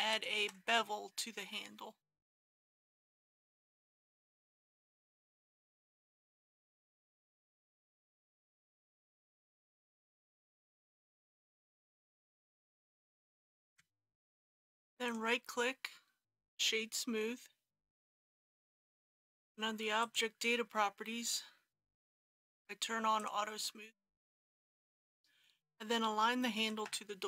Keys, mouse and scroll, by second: 0.8 middle click, 3.3 shift+click, 4.0 shift+click, 4.8 middle click, 5.7 alt+shift+click, 6.3 scroll up 1, 6.8-8.4 middle drag, 8.8 alt+shift+click, 9.6 shift+click, 10.5-10.9 scroll down 1, 11.1 ctrl+b, 12.3 click, 13.5 KP_Decimal, 13.7 KP_3, 14.4 click, 14.5 Tab, 15.0 right click, 16.4 click, 25.0 ctrl+z, 26.6 g, 26.9 y.